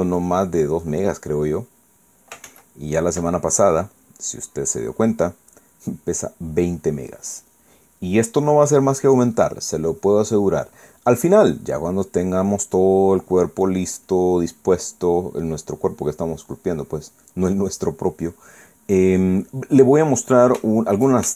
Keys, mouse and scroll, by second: 3.4 ctrl+z, 4.3-6.3 ctrl+drag, 6.4-8.1 drag, 8.2 click, 9.2 middle click, 10.0 middle click, 10.9-12.7 drag, 12.8-18.9 drag, 19.3 click, 20.1 click.